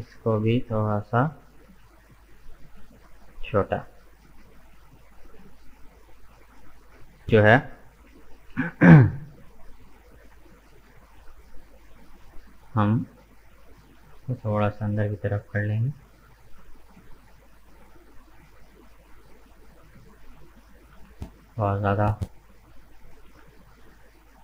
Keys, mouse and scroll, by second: 0.2 alt+right click, 1.3 s, 4.1-5.5 middle drag, 5.5 right click, 8.4 KP_1, 10.9 g, 20.0-23.0 middle drag.